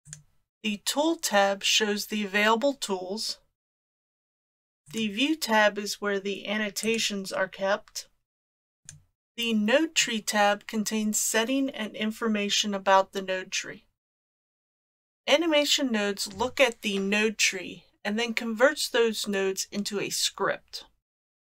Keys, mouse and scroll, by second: 0.0 click, 4.2 click, 4.9 click, 6.9 click, 8.8 click.